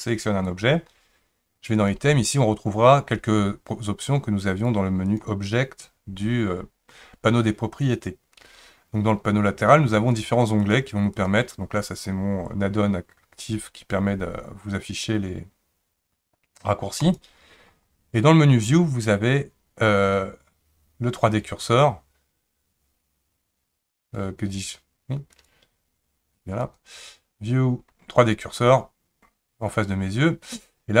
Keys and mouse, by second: 1.8 click, 5.1 click, 11.1 click, 17.1 click, 25.3 click, 26.7 click.